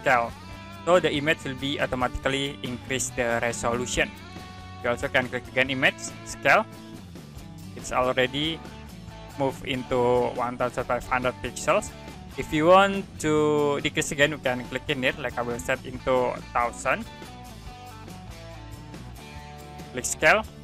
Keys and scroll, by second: 17.3 0.